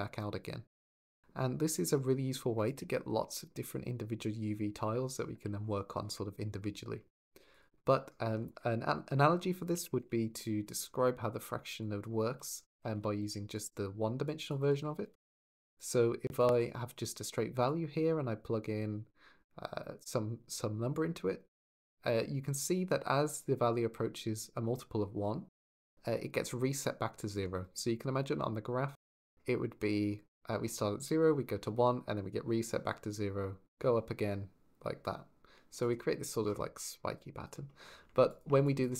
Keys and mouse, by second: 7.3 click, 8.2 shift+a, 11.6 drag, 16.2 ctrl+shift+drag, 17.6-18.6 shift+middle drag, 27.9-37.3 d, 30.1 click, 38.1 ctrl+shift+click.